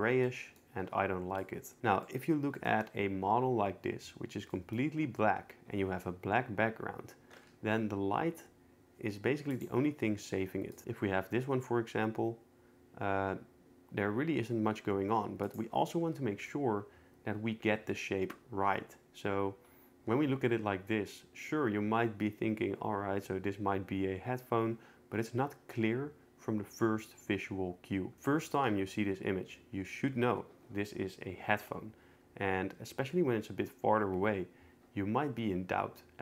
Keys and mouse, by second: 0.2 middle click, 1.4 click, 2.0 middle click, 4.5 middle click, 7.5 g, 9.5 right click, 10.7 click, 10.8 g, 29.2 n.